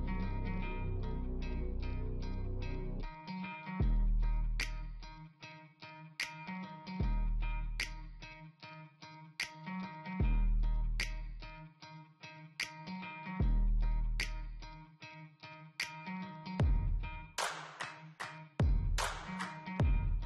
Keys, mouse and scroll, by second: 1.5 scroll down 1, 3.0-3.8 scroll up 1, 6.1 scroll down 1, 6.5 scroll up 1, 9.4 scroll down 1, 10.2 scroll up 1.